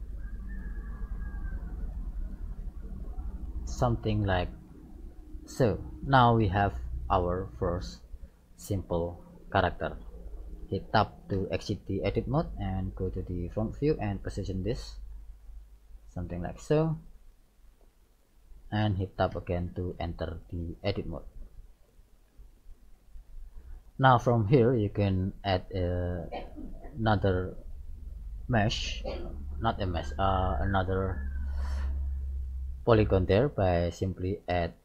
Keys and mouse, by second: 0.3 click, 0.3 right click, 1.2-2.5 drag, 3.2-7.0 middle drag, 11.5 Tab, 13.3 KP_1, 14.9 click, 17.4 middle click, 19.3 middle click, 19.4 Tab, 20.3-21.5 middle drag, 21.9-25.7 middle drag, 34.4-34.8 drag.